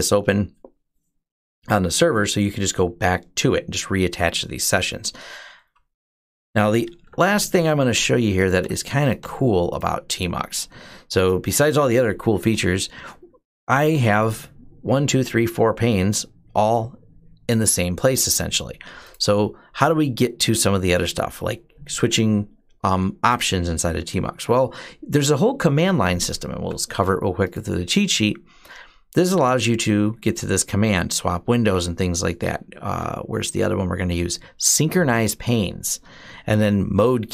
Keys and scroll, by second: 6.9 typing, 8.4 q, 9.0 q, 11.8-12.7 typing.